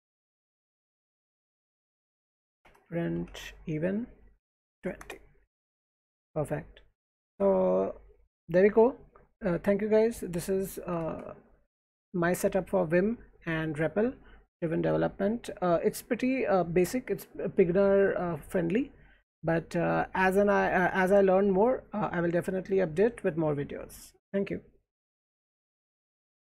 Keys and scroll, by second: 0.7 alt+Right, 1.3 alt+Left, 1.6-5.2 typing, 7.5 alt+Right, 10.8-11.6 typing, 12.2 Escape.